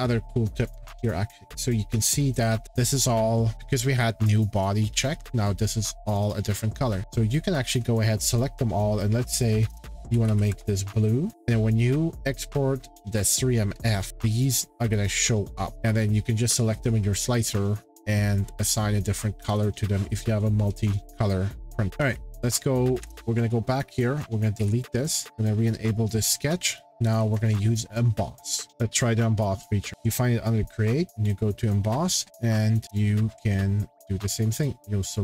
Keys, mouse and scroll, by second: 0.7 click, 2.4 shift+click, 7.1-10.2 drag, 9.7-10.8 typing, 11.3 click, 12.7-15.0 drag, 21.9 click, 22.0 ctrl+z, 24.0 click, 24.6 Delete, 25.3 click, 26.3 click, 26.7 click, 28.7 Page_Up, 29.9 click, 31.2 click, 32.4 click, 32.8-33.6 scroll, 34.0 click, 34.5 click, 35.1 click.